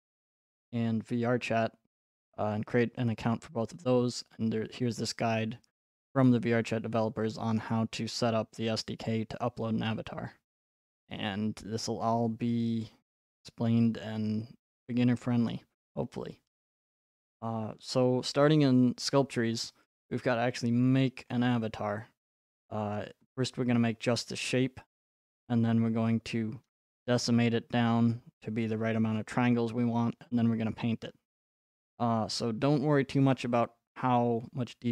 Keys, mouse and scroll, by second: 7.5-9.6 scroll, 9.6-10.1 scroll, 13.4 click, 17.3-18.0 scroll, 20.3-22.4 scroll, 22.4 scroll, 23.1 right click, 23.3-24.1 scroll, 24.1-25.1 scroll.